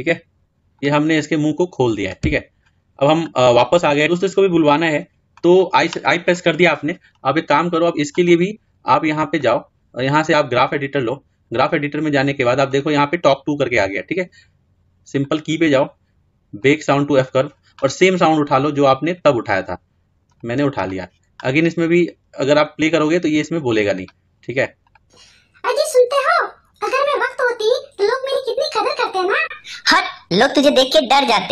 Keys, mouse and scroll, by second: 0.2-2.2 middle drag, 2.2 Tab, 8.2-11.8 drag, 12.6-17.2 drag, 24.7 click.